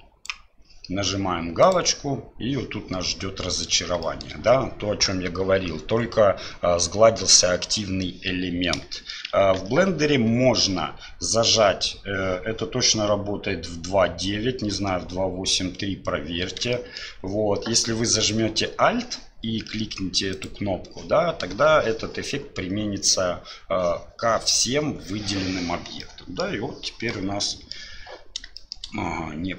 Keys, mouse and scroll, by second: 1.6 click, 4.0 shift+middle click, 8.9 shift+middle click, 9.6 ctrl+z, 16.7 shift+middle click, 20.3 alt+click, 26.0 middle click, 27.1 middle click, 28.5 shift+middle click.